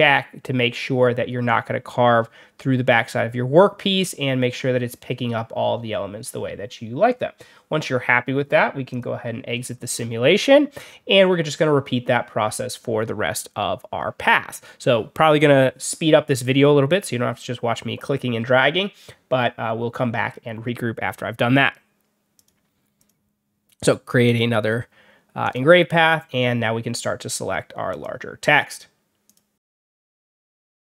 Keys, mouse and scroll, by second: 8.8 click, 9.4-9.8 scroll down 2, 9.8-10.4 scroll up 4, 22.2 click, 22.9 click, 24.1 click, 25.3 click, 27.8 click, 29.2 click, 29.6-30.9 drag.